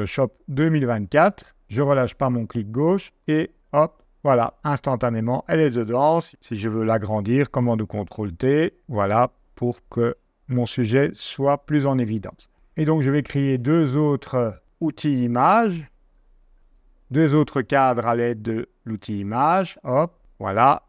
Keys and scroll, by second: 6.1 super+t, 7.2 super+t.